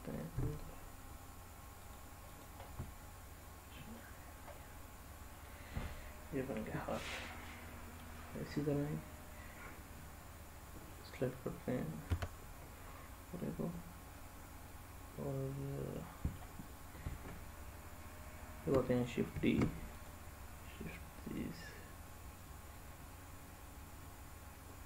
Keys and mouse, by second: 0.3 g, 1.7 click, 2.6-3.9 middle drag, 4.5 middle click, 7.0-8.1 middle drag, 12.1 Tab, 14.1-16.3 middle drag, 19.3 shift+d, 19.9 click, 21.4-24.8 drag.